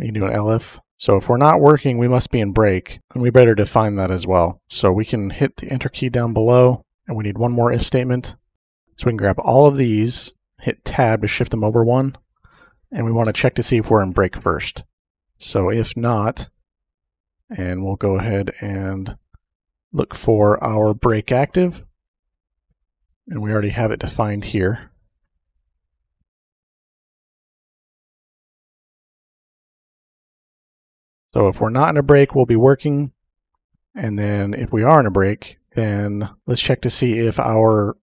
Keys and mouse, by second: 0.0-0.9 typing, 5.4 KP_Enter, 8.3-9.8 drag, 10.6 Tab, 10.7 typing, 11.8 click, 12.6-13.4 typing, 15.2 n, 15.3 o, 15.4 t, 15.5 space, 24.2-25.9 drag, 26.7 ctrl+c, 27.7 click, 28.4 ctrl+v, 28.4-29.8 typing, 29.3 click, 30.1 shift+Tab.